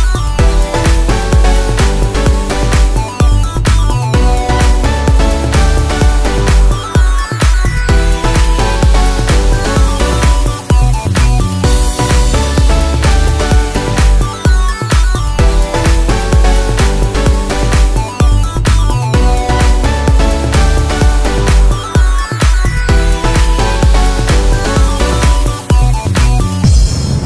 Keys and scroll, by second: 1.9 ctrl+a, 5.5 ctrl+z, 11.4 ctrl+t.